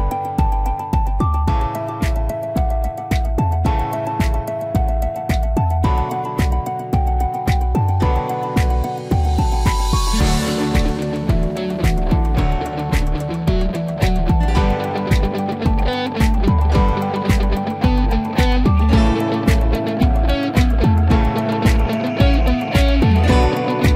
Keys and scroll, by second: 3.3 ctrl+8.